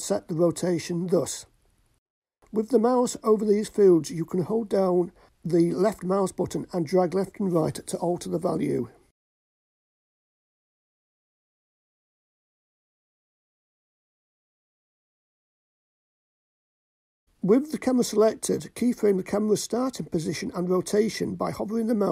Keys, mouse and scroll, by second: 2.1-3.2 drag, 4.2-5.4 drag, 6.8-8.9 drag, 12.1-15.4 drag, 17.2 click, 18.4 click, 20.8 i.